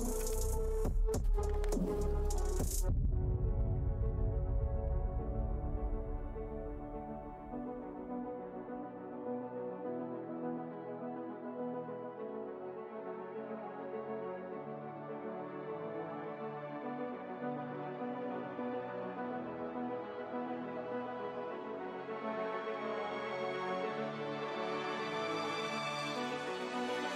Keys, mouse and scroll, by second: 0.2 scroll down 1, 8.2 ctrl+Tab, 9.9 right click, 11.0 click, 19.1 Print, 20.7 click, 24.0 alt+Tab, 24.7 ctrl+Tab, 25.3 click, 26.3 alt+Tab.